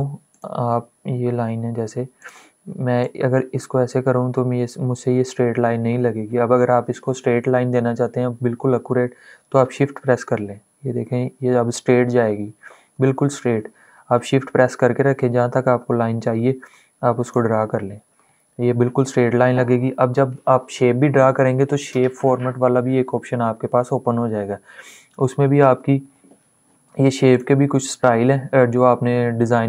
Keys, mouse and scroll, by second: 3.0-12.7 drag, 17.8-19.6 scroll up 2.